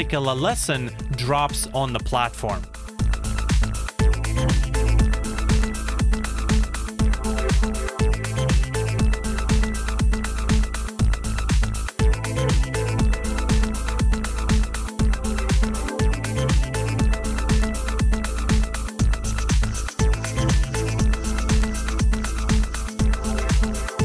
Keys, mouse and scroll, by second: 14.0-16.0 scroll down 1.